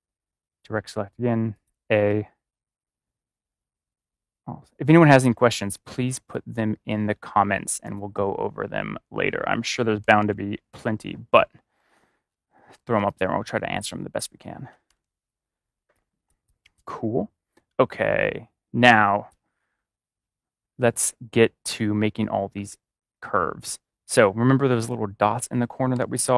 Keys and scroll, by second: 10.0 ctrl+-, 12.9 space, 14.6 ctrl+=, 15.8 space, 18.8 space, 25.9 v.